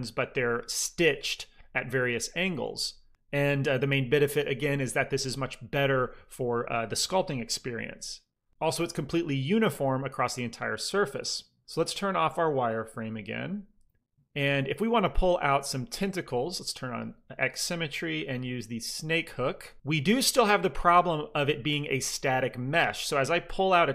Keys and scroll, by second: 19.1 f, 19.8 f.